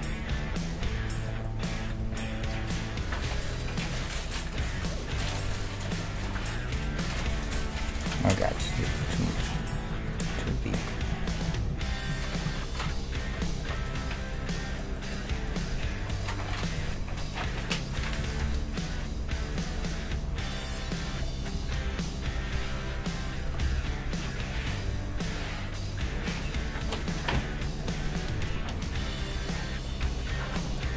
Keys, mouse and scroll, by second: 0.9 g, 1.4-4.4 middle drag, 2.6 g, 4.7 g, 8.3-10.3 middle drag, 8.8 ctrl+z, 9.1 ctrl+z, 9.2 ctrl+z, 9.4-10.3 ctrl+z, 10.8 ctrl+z, 11.2 ctrl+z, 11.5 ctrl+z, 11.7 ctrl+z, 12.1 ctrl+z, 12.4 ctrl+z, 12.9 ctrl+z, 13.4 middle click, 13.9-16.4 right drag, 16.4 click, 16.4-18.2 middle drag, 16.8 g, 18.2 g, 19.8-23.3 middle drag, 21.1-23.0 right drag, 21.5 g, 23.5 g, 28.0-30.9 middle drag.